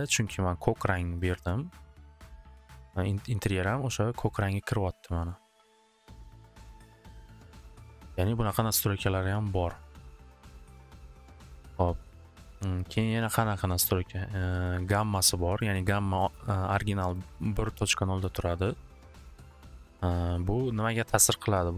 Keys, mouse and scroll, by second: 1.1 click, 6.1 click, 7.1-7.9 typing, 7.1 click, 7.2 click, 13.9 click, 14.6 click, 15.6 click, 16.2 click, 17.4 click, 18.2 click, 20.8 click.